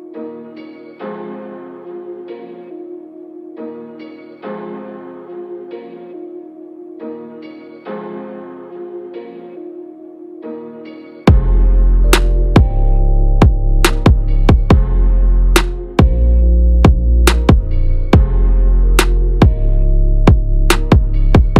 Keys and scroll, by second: 8.3 ctrl+=.